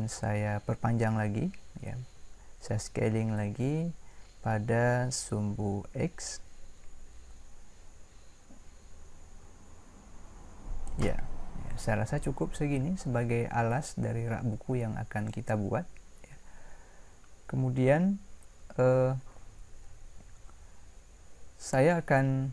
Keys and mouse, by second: 2.8 s.